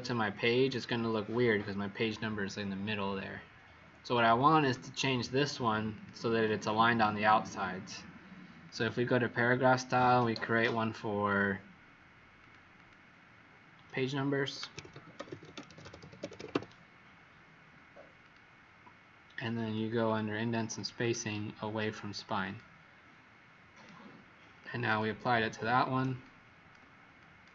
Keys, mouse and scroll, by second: 0.3 click, 0.7 click, 4.3 click, 4.5 click, 5.9 click, 12.7 click, 14.4-17.0 typing, 18.2 click, 20.0 click, 20.7 click, 21.0 click, 22.4 click, 26.2 click, 26.7 click, 27.1 click.